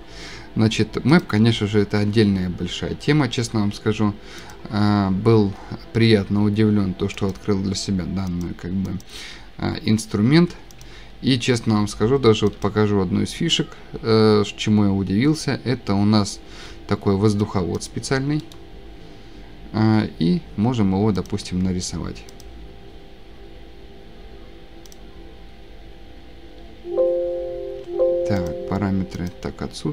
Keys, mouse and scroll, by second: 1.3 click, 4.5 click, 7.3 click, 8.4 click, 9.0 click, 10.3 Escape, 10.8 click, 12.7 click, 16.3 click, 17.9 click, 18.5 click, 21.3 scroll, 22.4 click, 22.8-23.2 scroll, 23.2 scroll up 1, 24.9 click, 26.3 Escape, 26.7 Escape, 27.8 Escape.